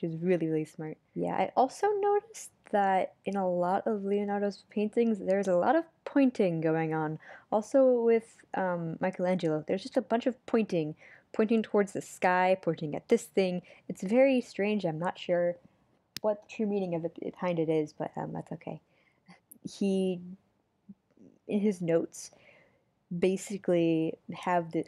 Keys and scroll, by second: 4.8 super+z, 5.5 super+z, 6.5 super+z, 21.8 super+z, 23.1 super+z, 23.9 super+z.